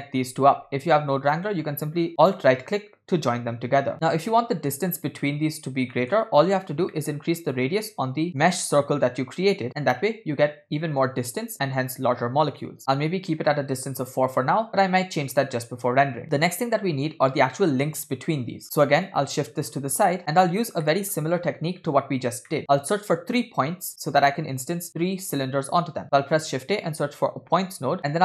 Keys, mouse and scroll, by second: 1.4-2.4 alt+right drag, 6.0 middle click, 6.2-8.2 scroll up 4, 7.0 middle click, 8.2 scroll up 1, 8.3 middle click, 8.3 scroll down 2, 8.9-9.6 scroll up 2, 9.7-12.8 drag, 16.2 scroll down 6, 18.6 middle click, 18.6 scroll down 2, 19.1-19.8 drag, 20.2 click, 20.9 middle click, 21.5-21.9 scroll up 2, 22.5 middle click, 26.0 shift+a, 28.0-28.2 scroll up 3.